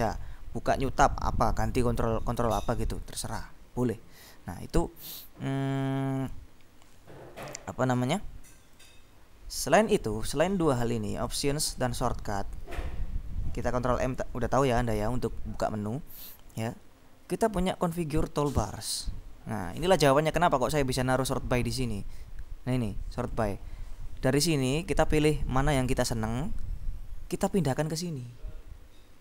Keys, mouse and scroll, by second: 4.6-5.0 scroll down 2, 9.0 click, 11.3-12.6 drag, 16.2 click, 18.6 click, 23.5 click, 24.6 click, 25.2-26.6 scroll down 1.